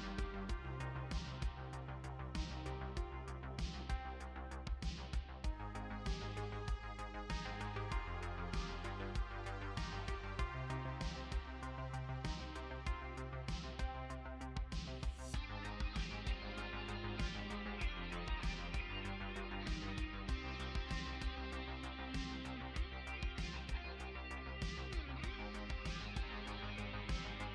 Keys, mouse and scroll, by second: 2.6 click, 4.0 x, 6.6 click, 10.2 click, 14.0 click, 17.2 click, 21.4 click, 22.5 click, 24.3 F2.